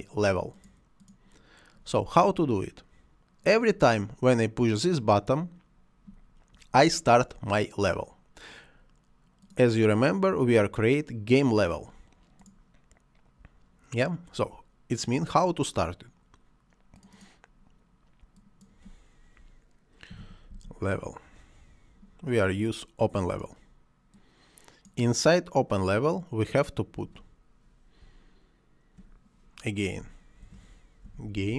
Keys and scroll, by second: 20.1 l, 20.3 e, 20.5 v, 20.7 e, 30.4-31.5 typing.